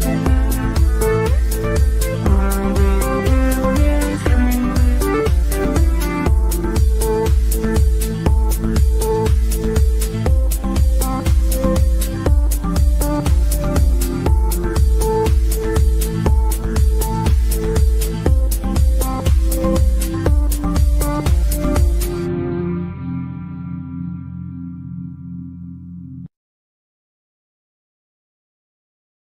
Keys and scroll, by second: 23.1 Escape, 24.7 Delete, 27.2 Delete.